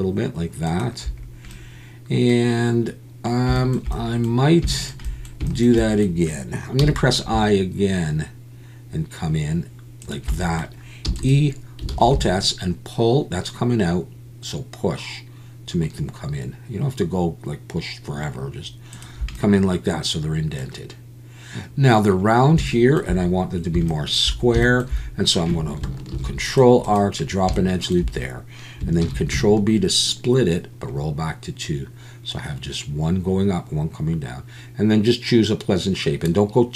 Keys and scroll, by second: 11.1 e, 11.9 alt+s, 26.1 ctrl+r, 29.0 ctrl+b.